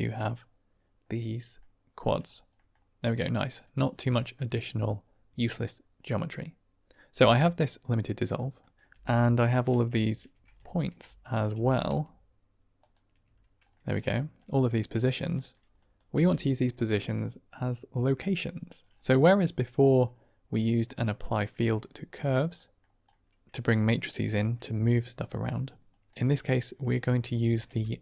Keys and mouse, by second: 2.4 middle click, 4.1 click, 7.0 g, 8.6 drag, 8.8 g, 10.6 ctrl+shift+click, 11.2 click, 11.4 g, 12.7 ctrl+right click, 13.6 middle drag, 14.1 shift+middle drag, 15.3 middle click, 15.7-16.0 drag, 16.0 g, 19.1 click, 19.5 click, 20.9 click, 22.4 click, 23.0 click, 26.1 click, 27.3 shift+a.